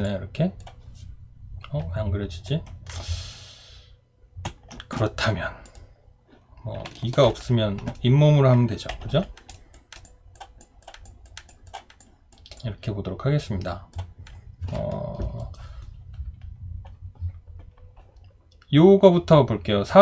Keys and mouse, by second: 4.5 Print.